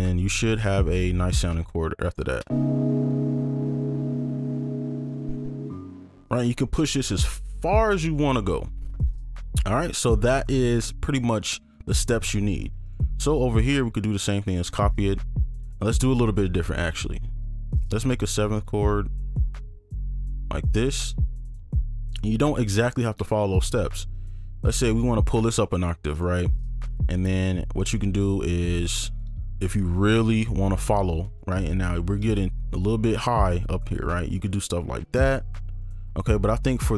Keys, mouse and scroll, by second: 1.4 right click, 1.7-2.0 scroll up 1, 2.0-2.4 scroll down 1, 2.7 space, 5.7 space, 9.5-10.1 scroll down 1, 12.6 scroll down 1, 12.9 right click, 13.2 ctrl+click, 14.7 ctrl+Up, 15.0 scroll up 1, 15.5 ctrl+click, 18.2 shift+click, 18.8 shift+click, 19.9 shift+click, 21.3 right click, 21.3-23.0 scroll up 1, 23.7 ctrl+click, 24.2 shift+click, 24.9 ctrl+Up, 26.1 right click, 26.8-27.7 scroll up 1, 27.7 ctrl+click, 28.8 right click, 28.8 ctrl+click, 29.1 ctrl+click, 30.4 ctrl+Up, 30.7 ctrl+scroll up 2, 31.3 ctrl+click, 32.3 shift+click, 33.5 ctrl+Down, 34.5-35.0 scroll down 1, 35.0-35.4 scroll up 1, 35.4 right click, 36.0-36.9 scroll down 1.